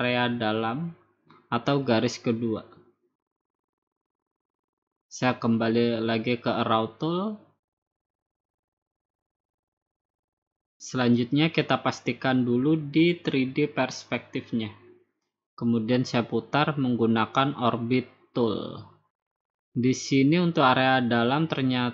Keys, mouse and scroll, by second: 0.8-2.0 drag, 3.9 click, 6.0 click, 7.0 click, 8.4 click, 13.7 click, 15.4 scroll, 17.4 click, 18.8-19.5 scroll up 11.